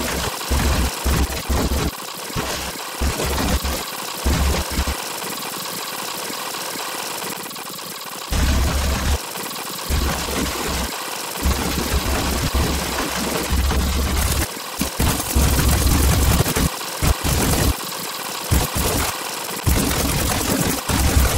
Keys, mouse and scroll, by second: 0.0-4.9 typing, 0.1 scroll up 2, 0.3 click, 0.9 alt+click, 1.4 click, 1.9 scroll down 2, 2.0 Delete, 2.1 click, 2.2 click, 2.4 middle click, 2.8 alt+middle click, 3.0 scroll down 2, 3.5 middle click, 3.6 scroll down 2, 3.8 alt+click, 4.6 click, 5.0 click, 5.1 ctrl+click, 5.4 ctrl+click, 6.3 click, 6.4 click, 6.7 click, 7.6 click, 7.7 click, 8.0 ctrl+click, 8.3 space, 8.4 scroll down 2, 8.5 click, 8.6 right click, 8.7 click, 8.9 right click, 9.1 space, 9.3 right click, 9.7 click, 10.1 click, 10.3 click, 10.8 space, 10.8 click, 11.4 space, 11.5 scroll down 2, 12.6 ctrl+click, 12.9 scroll up 2, 13.1 click, 13.4 click, 13.6 click, 13.7 click, 13.8 scroll down 2, 14.6 click, 14.7-19.0 typing, 14.8 right click, 14.9 click, 15.2 middle click, 15.5 middle click, 15.8 alt+middle click, 16.7 click, 16.9 click, 17.1 click, 17.7 click, 17.7 scroll up 2, 18.2 scroll down 2, 18.9 scroll up 2, 19.3 alt+middle click, 19.8 middle click, 19.9 scroll up 2, 20.4 alt+middle click, 20.6 space, 20.7 space, 21.1 scroll down 2, 21.3 right click.